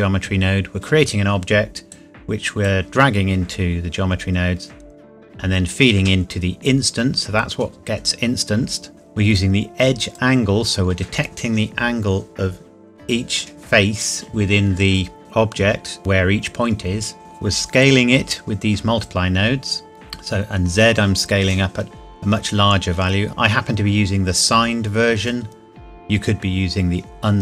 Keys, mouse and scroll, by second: 1.9 click, 2.2 click, 9.3 click, 17.8 click.